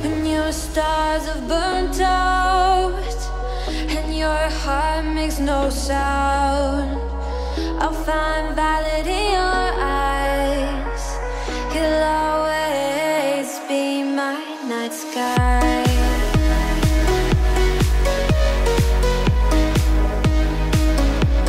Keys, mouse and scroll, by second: 0.1 click, 7.4 g, 7.5 click, 7.8 g, 8.3 click, 8.7 alt+g.